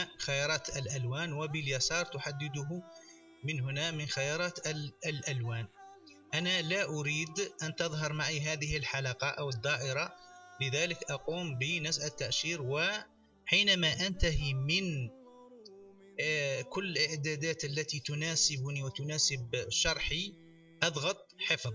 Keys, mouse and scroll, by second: 1.5 click, 10.1 click, 21.4-21.7 drag.